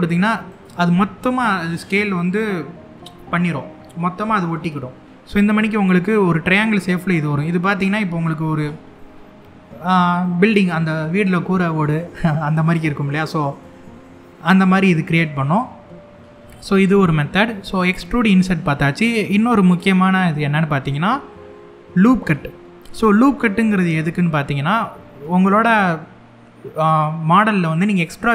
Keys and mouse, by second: 0.1 click, 5.8-8.3 middle drag, 8.6 middle click, 9.9 middle click, 12.4 middle click, 14.6 middle click, 16.2 middle click.